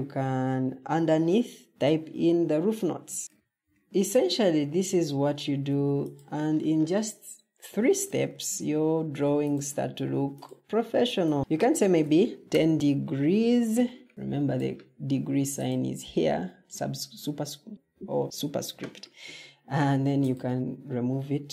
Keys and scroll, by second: 3.5 ctrl+d, 11.4-12.7 typing, 13.9-14.6 typing.